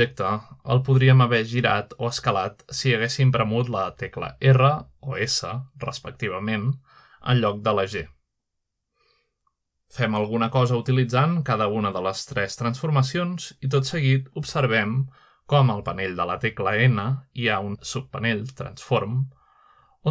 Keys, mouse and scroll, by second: 1.0-1.9 middle drag, 2.2 middle click, 2.5 r, 5.6 right click, 6.1 s, 8.6 click, 9.2 click, 9.5 click, 9.9 r, 11.6 click, 11.9 s, 12.9 click, 13.0 typing, 13.8 click, 14.4 typing, 15.2 click, 15.5 typing, 16.2 click, 16.6-17.6 scroll down 2, 17.5 typing.